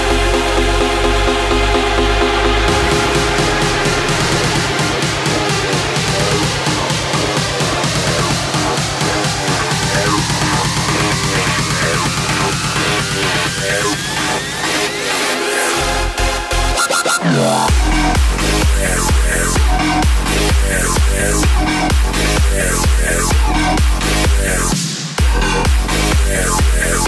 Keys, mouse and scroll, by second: 1.7 space, 2.6-9.7 drag, 10.9-12.7 drag, 12.7 space, 24.5 space.